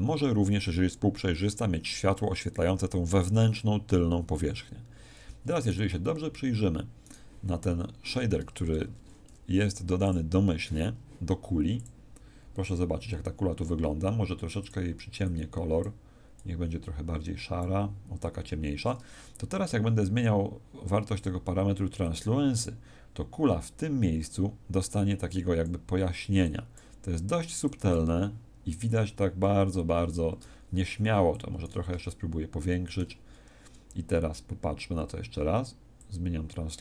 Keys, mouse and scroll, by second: 5.5 right click, 8.7 ctrl+2, 10.0 click, 14.5 click, 21.1 click, 25.1 click, 31.3 click, 32.0 ctrl+middle click, 34.1 scroll down 2, 35.9 scroll down 1, 35.9 click.